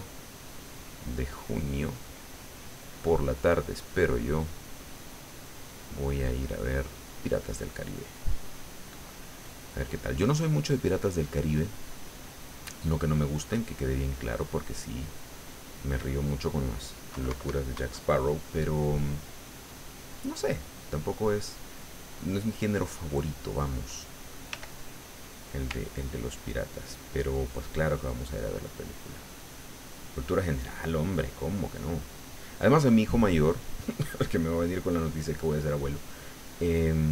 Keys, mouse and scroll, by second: 0.6-5.5 drag, 5.9 click, 6.3 click, 6.6 click, 7.8 click, 8.6 click, 9.4-16.5 drag, 17.1 KP_Subtract, 18.1-21.7 middle drag, 22.1 middle click, 24.5 f, 25.2 click, 25.8-27.3 ctrl+drag, 27.3-30.1 ctrl+drag, 30.2-32.6 ctrl+drag, 33.2-35.7 drag, 35.8-37.1 drag.